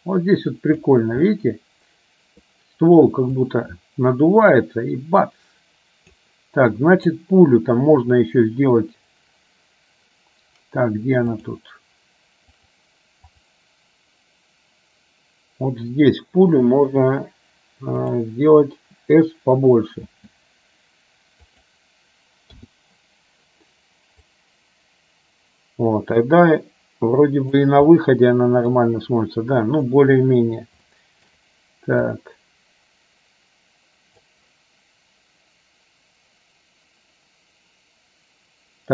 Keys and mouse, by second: 1.4-2.5 middle drag, 3.5-6.4 drag, 7.0 click, 11.5 click, 12.8 click, 13.4 click, 18.3 click, 20.2 s, 22.8 i, 24.4-27.8 drag, 28.2 middle click, 30.9 shift+middle click, 32.2-34.4 drag.